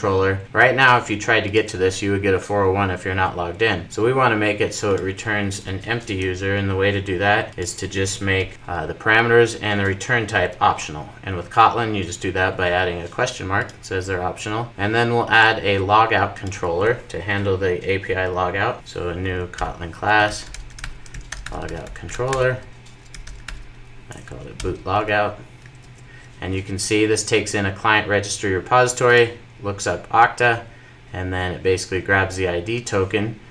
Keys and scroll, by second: 10.3 super+s, 18.7 super+n, 19.3 super+n, 24.9 Return, 25.5 super+s.